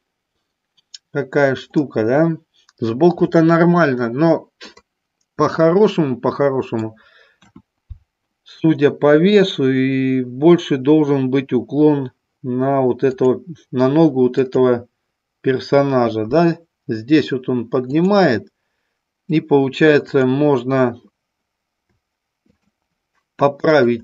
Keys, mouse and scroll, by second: 1.8-4.6 middle drag, 5.4-6.8 middle drag, 7.4 KP_1, 13.1 click, 14.4 click, 17.9 click, 20.1 click, 22.5 shift+click, 23.6-24.0 shift+drag.